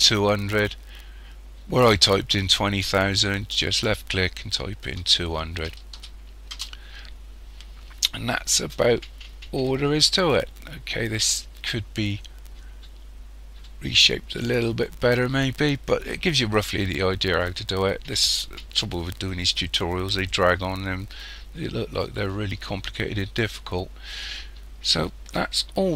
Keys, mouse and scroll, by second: 3.8 click, 6.0 0, 16.6 scroll down 1.